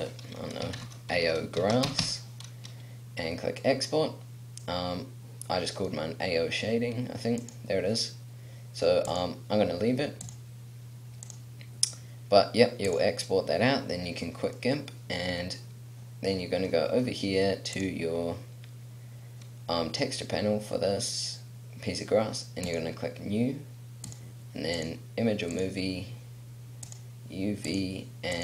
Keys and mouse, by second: 14.4-19.8 middle drag.